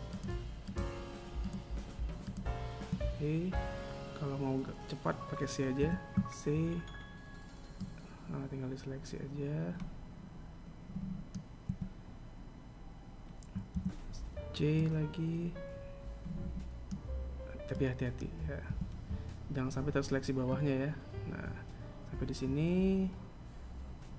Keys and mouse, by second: 0.2 shift+right click, 1.0 shift+right click, 1.8 shift+Right, 1.8 right click, 5.3 c, 13.3 c, 23.2 middle click, 23.7 right click.